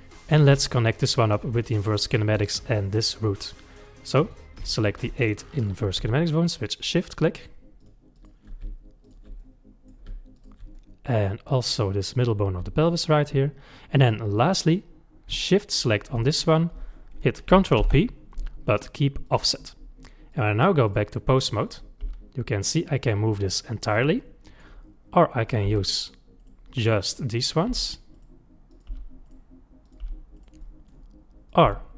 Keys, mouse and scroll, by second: 1.2-2.8 middle drag, 2.8 click, 3.8 click, 4.2 click, 4.8 shift+click, 5.1-6.5 middle drag, 6.5 shift+click, 7.0 shift+click, 7.8 shift+click, 8.1 shift+click, 9.0 shift+click, 9.4 middle click, 10.4 shift+click, 10.7-12.8 middle drag, 12.8 shift+click, 14.0-15.7 middle drag, 15.7 shift+click, 17.8 ctrl+p, 20.3-21.8 drag, 22.0 g, 24.2-25.4 middle drag, 25.4 click, 25.7 g, 26.8 click, 27.3 click, 27.7 g, 28.7 click, 28.9 g, 29.9 click, 30.0 g, 30.6-31.5 middle drag, 31.5 click, 31.7 g.